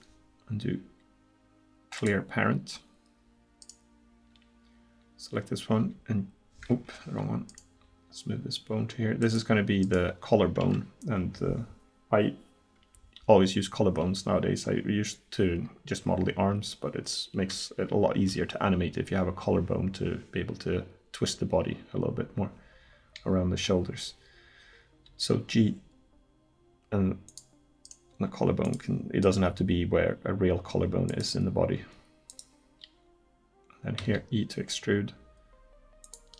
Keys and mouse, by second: 3.6 right click, 5.8 g, 7.8 g, 9.8-14.7 right drag, 25.1 g, 27.9-29.7 drag, 28.1 g, 29.5 g, 30.8 click, 31.8 g, 34.0 e.